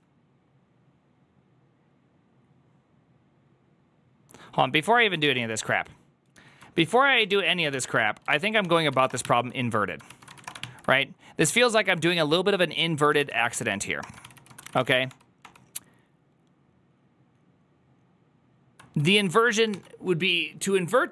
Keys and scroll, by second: 6.6 alt+{, 6.6 ctrl+c, 6.8-10.2 typing, 9.9 ctrl+c, 10.3 Return, 10.4 ctrl+n, 11.4 ctrl+p, 12.6-15.0 typing, 14.1 ctrl+c, 14.2 ctrl+c, 15.3 ctrl+d, 18.8 typing.